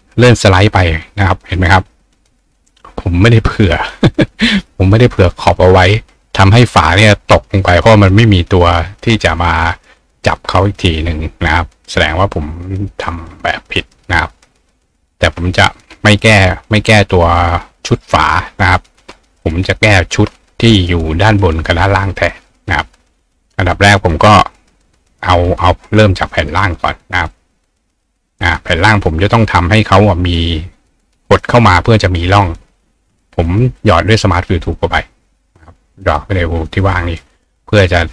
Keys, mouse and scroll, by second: 15.3-18.8 drag, 19.4 ctrl+click, 26.6 click, 27.3 click, 34.1 click, 34.7 click.